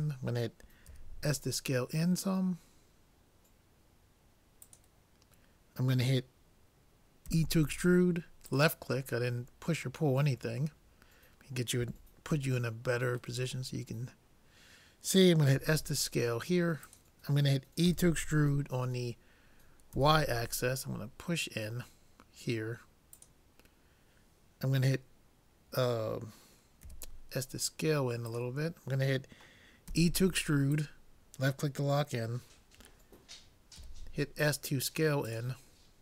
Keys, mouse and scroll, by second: 0.9 s, 7.3 e, 9.2-12.1 middle drag, 12.7-14.5 middle drag, 15.6 s, 17.9 e, 26.9 s, 29.9 e, 33.9 s, 35.8-36.0 middle drag.